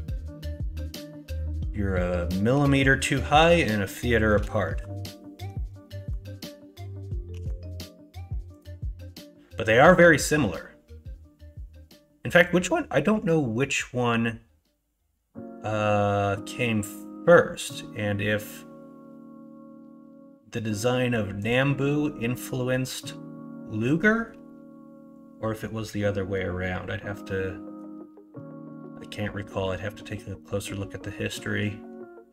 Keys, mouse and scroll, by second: 7.3 alt+e.